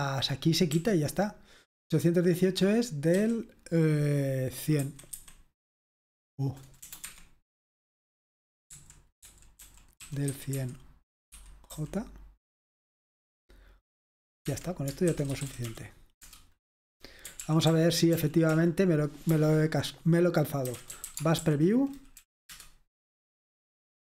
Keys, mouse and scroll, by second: 0.0-0.1 typing, 3.2 d, 4.8 1, 6.3-6.9 typing, 7.0 Escape, 8.8-11.7 typing, 14.5 Escape, 14.9-16.2 typing, 16.2 Return, 17.4 ctrl+p, 17.7 ctrl+p, 18.2 ctrl+p, 18.5 ctrl+p, 19.3 ctrl+c, 20.5-22.5 typing, 22.2 Right.